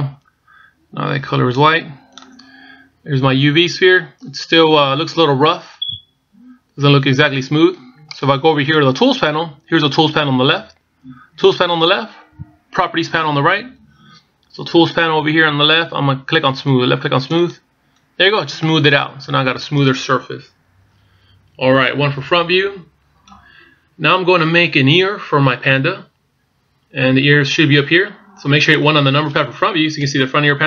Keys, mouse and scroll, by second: 2.2 click, 6.1 middle click, 18.0 click, 19.4 middle click, 22.7 KP_1, 27.1-30.3 scroll down 1.